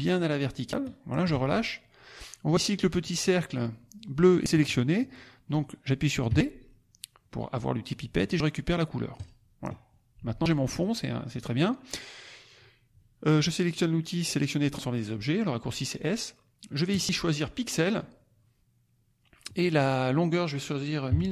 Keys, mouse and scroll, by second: 6.2 d, 9.1 click, 10.6 click, 16.8 click, 17.8 click, 19.3 click, 21.0 KP_1, 21.2 KP_9.